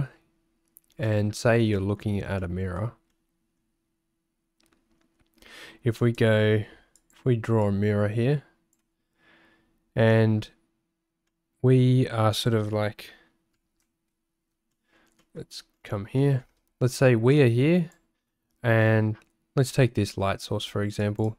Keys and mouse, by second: 1.1 shift+click, 1.8 click, 2.4 shift+click, 3.2 middle click, 6.2 ctrl+alt+shift+1, 7.0 click, 7.6-8.8 drag, 11.4 click, 14.7 shift+click, 15.3 shift+click, 16.3 shift+click, 17.3 click, 21.0 click.